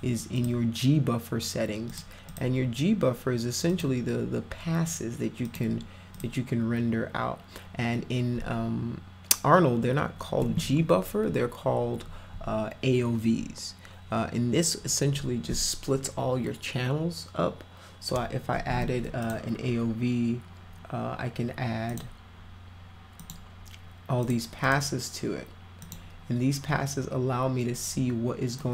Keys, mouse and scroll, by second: 0.4 click, 1.9 click, 2.3 click, 3.7 click, 5.5 click, 6.2 click, 19.2 click, 19.8 scroll up 2, 21.9 click, 23.2 click, 24.2 click, 24.6 click, 25.8 click, 28.6-28.7 drag.